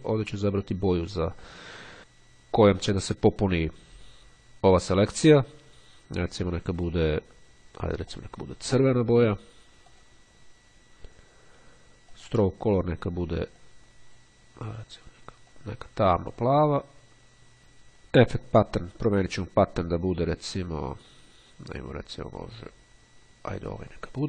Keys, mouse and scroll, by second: 0.8 click, 7.0-7.9 drag, 10.0 click, 12.0 click, 13.8-14.8 drag, 15.0 click, 18.6 click, 21.0-22.1 scroll down 1, 23.8 click.